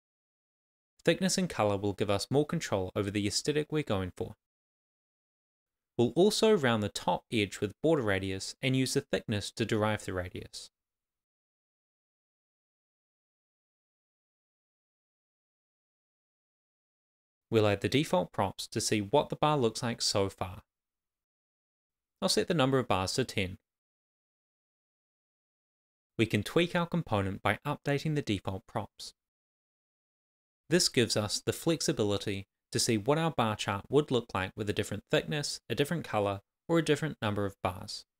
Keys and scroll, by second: 0.5 super+s, 5.9 shift+h, 6.4 Return, 7.1 shift+r, 8.5 shift+;, 8.6 shift+space, 9.0 Left, 10.5-12.8 typing, 14.5 Right, 16.2 shift+r, 16.5 Tab, 17.5 shift+r, 17.7 Tab, 18.7 Return, 19.1 shift+b, 19.5 Tab, 20.5-23.0 typing, 21.2 Return, 23.4 Return, 25.0 Return, 25.9 shift+;, 25.9 shift+space, 27.0 super+s, 28.7 shift+;, 28.8 super+s, 31.8 super+s, 33.6 super+s, 37.4 super+s.